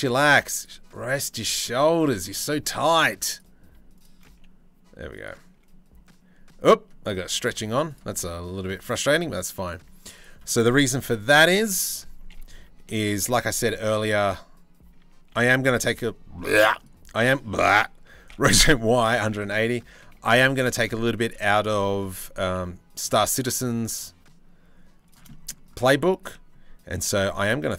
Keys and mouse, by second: 0.7 click, 1.1 r, 3.5 shift+middle click, 3.9 g, 5.2 g, 7.0 g, 7.7 middle click, 8.7 middle click, 9.7 click, 10.6 KP_3, 11.2 KP_1, 12.4 r, 13.7 t, 14.9 y, 15.1 KP_1, 15.1 KP_8, 15.2 KP_0, 17.9 r, 19.5 r, 20.8 KP_3, 21.2 KP_1, 22.0 g, 24.9 click, 25.6 drag, 26.5 g.